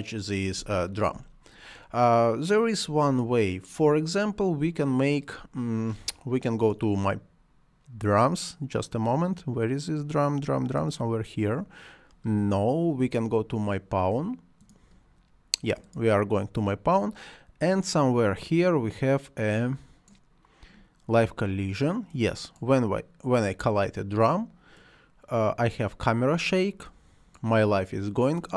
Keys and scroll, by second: 0.5 space.